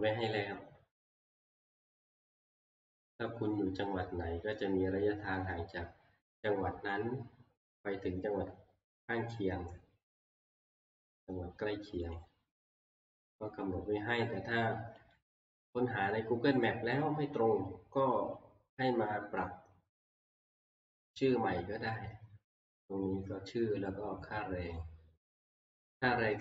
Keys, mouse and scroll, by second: 0.2 click, 2.7 scroll, 11.2 click, 12.2 click, 12.7 scroll down 2, 12.9 scroll, 15.1 click, 16.2-19.4 drag, 16.2-16.5 scroll up 2, 21.2 click, 22.5 scroll down 2, 22.7 scroll, 24.8 click, 25.7 click.